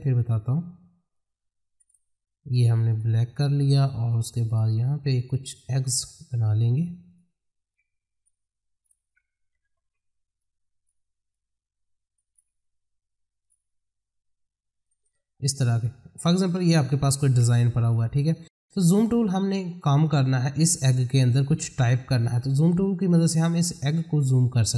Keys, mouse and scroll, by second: 1.1 click, 1.8 right click, 2.9 click, 6.1 space, 7.1 click, 8.2 ctrl+right click, 9.5 ctrl+r, 10.4-12.1 drag, 12.1 ctrl+right click, 13.4 click, 17.3 F4, 17.8 click, 23.9 click.